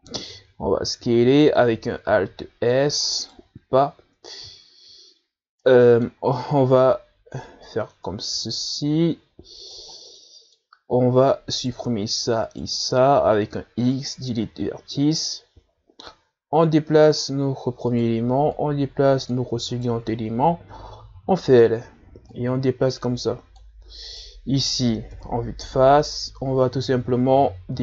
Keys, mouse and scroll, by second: 0.8-1.2 scroll down 2, 1.2-1.8 scroll up 4, 1.8 s, 3.4 alt+s, 5.0 scroll up 2, 6.9 middle click, 7.5-7.9 scroll down 3, 8.2-8.7 scroll down 1, 8.7-11.2 drag, 11.2 scroll down 1, 11.4 middle click, 12.2-12.8 scroll up 1, 12.8 right click, 13.7 shift+right click, 14.5 x, 16.4 right click, 17.3-19.2 drag, 19.2 right click, 19.8-21.0 drag, 21.0 right click, 22.4 l, 23.6-25.3 drag, 25.3 right click, 26.4 KP_1, 27.2-27.7 scroll up 3.